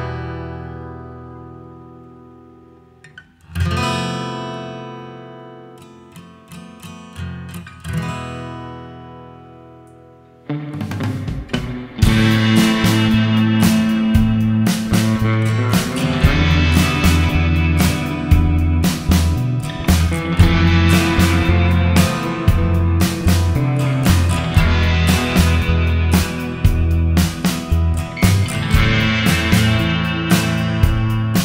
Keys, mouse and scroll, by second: 0.7-1.0 scroll up 6, 1.1 shift+middle click, 2.3 click, 3.1 click, 3.3 click, 3.9 scroll down 2, 4.1 middle click, 4.9 scroll down 1, 4.9 middle click, 5.7 middle click, 7.1 click, 8.1 click, 8.8 middle click, 9.7 middle click, 10.3-10.8 scroll down 3, 10.8 middle click, 11.9 middle click, 12.6 middle click, 13.1 scroll up 1, 14.1-14.9 scroll down 4, 15.0 shift+middle click, 15.4-15.7 scroll down 3, 16.4 click, 16.9 click, 18.4 click, 22.3 space, 22.8-23.5 scroll up 2, 23.5 middle click, 25.7 scroll down 3, 26.3 middle click, 26.6-26.9 scroll down 2, 28.8-29.3 scroll down 3, 29.3 middle click, 29.7 middle click, 30.4-30.7 scroll up 4, 30.8 middle click.